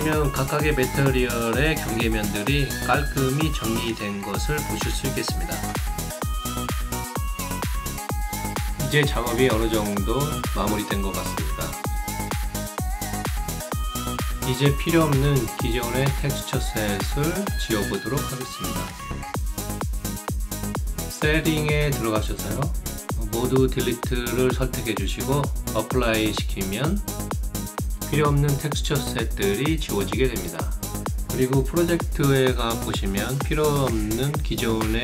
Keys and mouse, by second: 0.9 alt+right click, 1.2 alt+middle click, 1.7 alt+click, 2.7 alt+middle click, 3.0 alt+right click, 3.5-6.5 alt+drag, 6.7 alt+right click, 7.3 alt+right click, 7.6 alt+middle click, 7.9 alt+click, 8.3 alt+middle click, 8.7 alt+click, 9.7 alt+middle click, 10.0 alt+click, 12.8-13.9 alt+drag, 14.1-15.2 alt+drag, 15.4 alt+middle click, 15.8 alt+right click, 17.8 click, 22.5 click, 23.5 click, 24.4 click, 25.4 click, 25.8 click, 26.4 click, 30.7 shift+right click, 31.2 alt+shift+click, 31.7 alt+middle click, 32.3 alt+click, 33.0 alt+middle click, 33.3 alt+right click, 33.5 alt+click, 34.4 alt+middle click.